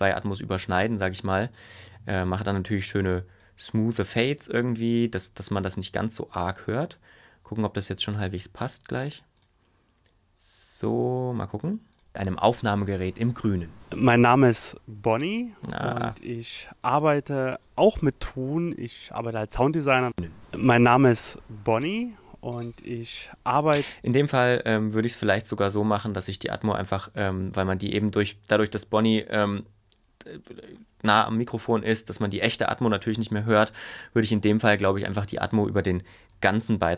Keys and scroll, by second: 12.1 space, 23.8 space.